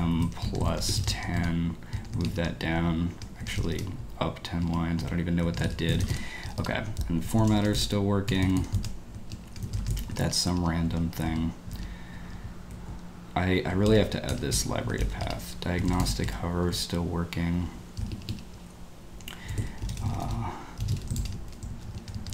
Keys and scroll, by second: 0.0-2.2 typing, 2.0 Escape, 2.1 Escape, 3.4 Escape, 3.5 g, 3.7 g, 4.6 ctrl+d, 4.9-10.8 typing, 8.8 Return, 10.4 ctrl+d, 11.3 Return, 12.1 ctrl+d, 12.1 ctrl+u, 12.5-17.2 typing, 15.0 ctrl+w, 18.2 ctrl+d, 19.2-22.3 typing, 22.2 Escape.